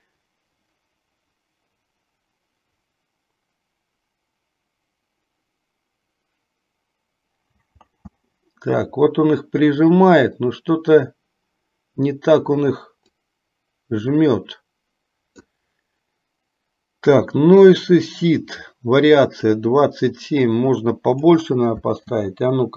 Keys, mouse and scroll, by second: 7.9 space, 13.2-15.7 drag, 19.6-21.6 drag, 22.1 space.